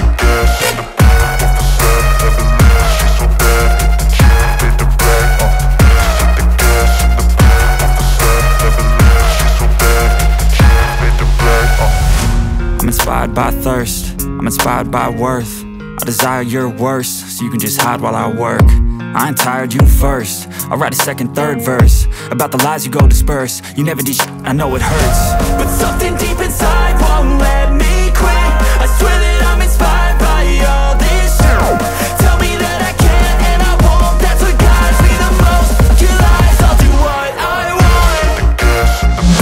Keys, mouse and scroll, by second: 2.9 alt+scroll down 1, 5.3-6.0 alt+scroll up 1, 8.9-12.9 alt+drag, 12.9 space, 13.0 click, 13.2 space, 13.8-17.9 drag, 17.9 alt+scroll up 1, 19.3-19.6 alt+scroll down 1, 20.7 click, 23.0 alt+scroll up 1, 23.8-27.0 alt+drag, 28.1 alt+scroll down 1, 30.6 alt+click, 35.1-37.4 scroll down 2, 37.6-38.1 alt+scroll up 1, 39.1 alt+scroll down 1.